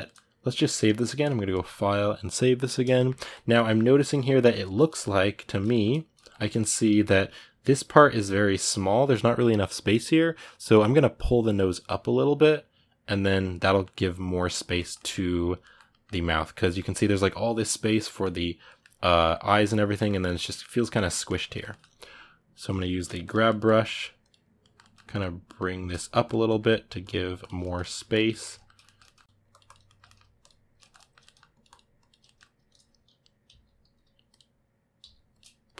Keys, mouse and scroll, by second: 22.5 g, 22.7 f, 23.2 middle click, 23.7 click, 24.4 ctrl+middle click, 25.0 click, 25.2 middle click, 25.9 click, 26.2 middle click, 26.9 click, 27.4 middle click, 27.9 click, 28.0-29.2 middle drag, 29.2 click, 29.6 ctrl+middle click, 30.2 click, 30.6 ctrl+middle click, 31.3 click, 32.0-33.2 ctrl+middle drag, 33.2 g, 34.1 click, 34.8 f, 35.4 click.